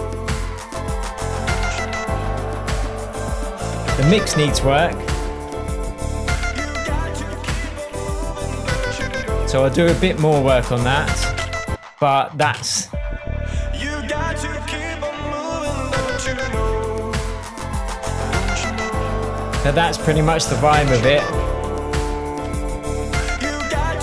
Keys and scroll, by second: 11.6 space, 12.8 space.